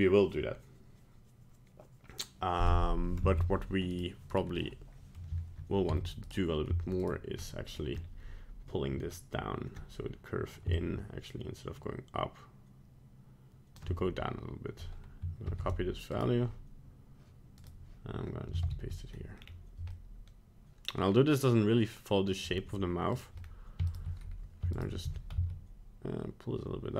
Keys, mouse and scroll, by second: 3.3 ctrl+Tab, 3.9 right click, 4.3 right click, 4.6 middle click, 5.1 middle click, 5.9 Tab, 6.3 right click, 7.0 right click, 7.4 middle click, 7.9 scroll up 1, 10.7 shift+click, 15.4 ctrl+c, 16.1 right click, 17.6 right click, 18.6 ctrl+v, 19.4 scroll down 2, 19.9-20.9 middle click, 20.7 middle click, 20.7 middle click, 21.0 middle click, 21.2 middle click, 22.4 middle click, 23.1 right click, 23.4-23.8 scroll up 1, 23.9 shift+right click, 24.7 right click, 25.0 g.